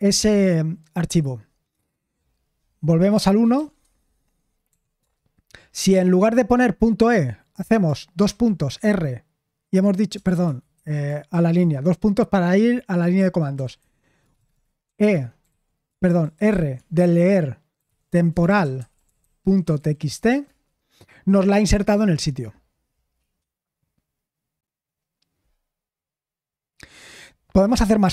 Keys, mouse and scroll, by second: 3.4-4.3 typing, 8.5-8.8 typing, 10.3 BackSpace, 10.4 BackSpace, 10.7 Escape, 11.3 shift+;, 13.5-15.9 typing, 18.5-20.8 typing.